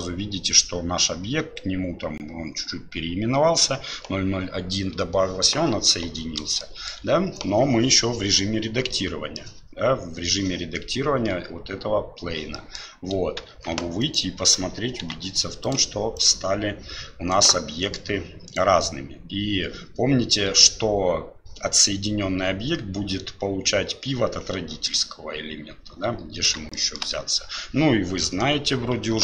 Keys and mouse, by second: 6.6 shift+middle click, 8.9 middle click, 12.5 middle click, 14.0-15.0 right drag, 15.0 g, 17.8 right click, 26.7 shift+middle drag.